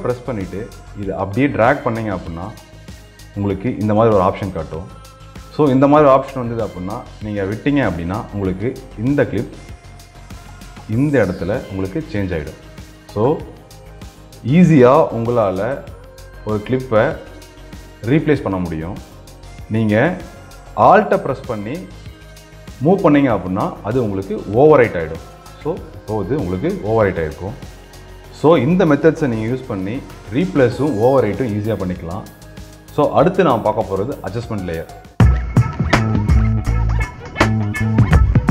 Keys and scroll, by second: 9.3 ctrl+z, 27.8 ctrl+z.